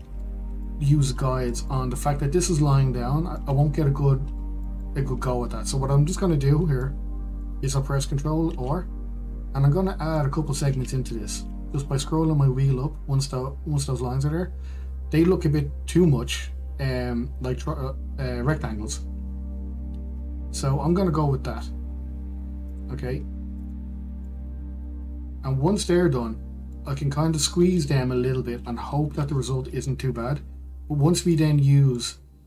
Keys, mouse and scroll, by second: 9.8 ctrl+r, 25.5-30.1 middle drag.